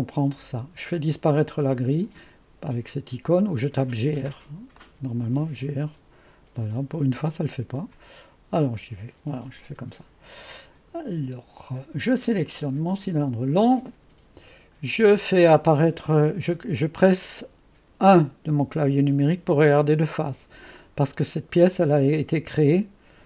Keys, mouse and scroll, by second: 3.9 typing, 4.8 click, 5.2 typing, 6.6 typing, 7.2 click, 8.6 click, 9.2-9.6 drag, 12.9 click, 18.6 1.